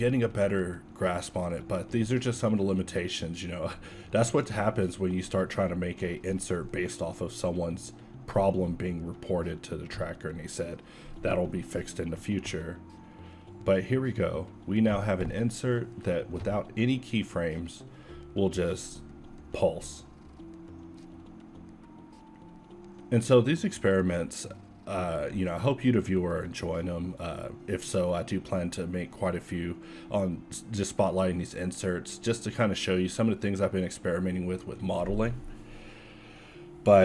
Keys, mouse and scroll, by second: 10.5 shift+z, 11.2 alt+a, 18.1 alt+a, 18.5 z, 20.0 Tab, 20.7 z, 21.3 ctrl+Tab, 23.3 e, 25.4 z, 26.8 Tab, 27.6 g, 29.2 s, 30.4 a, 31.9 alt+a.